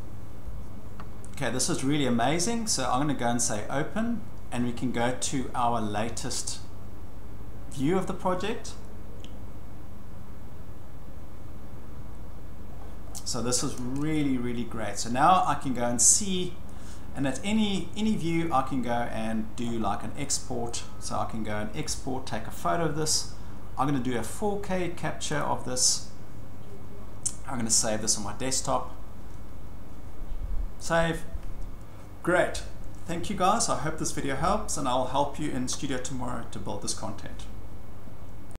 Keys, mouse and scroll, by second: 0.2 scroll, 1.8-2.3 shift+scroll, 3.5 click, 4.2-8.6 drag, 12.7-14.1 scroll, 13.0-15.7 middle drag, 16.7-18.1 shift+middle click, 17.7 scroll, 19.2 middle click, 19.6 shift+middle click, 19.8 middle click, 20.5 scroll, 21.9 click, 25.4 click, 28.6 scroll down 7, 30.8 click, 30.8 scroll, 33.8 click, 34.2 click, 35.4 click.